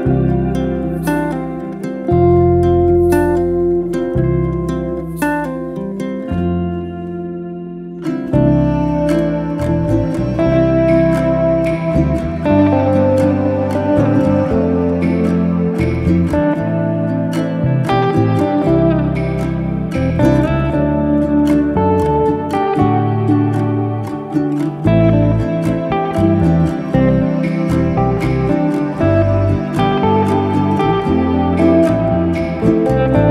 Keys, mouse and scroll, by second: 0.7 z, 1.1 s, 2.1 scroll up 2, 2.4-3.1 shift+middle drag, 3.1 alt+d, 5.5 r, 7.5 z, 7.7 s, 9.1-9.7 scroll down 11, 9.7-11.2 middle drag, 13.3-13.8 middle drag, 13.8 scroll down 1, 14.0-14.6 middle drag, 14.6-15.4 scroll up 4, 15.4 middle click, 15.8 KP_1, 16.4-17.5 scroll up 8, 17.5 alt+d, 19.2 r, 21.1 z, 21.3 middle click, 22.0 s, 22.8 scroll down 1, 23.0-23.9 middle drag, 23.9 click, 24.0 Tab, 24.8 1, 25.0 click, 25.6 shift+s, 26.9 click, 27.6 shift+s, 28.4 Tab, 28.6 scroll down 2, 28.8 middle click, 29.5 shift+a, 31.8 s, 32.8 Tab, 33.0-33.3 scroll up 1.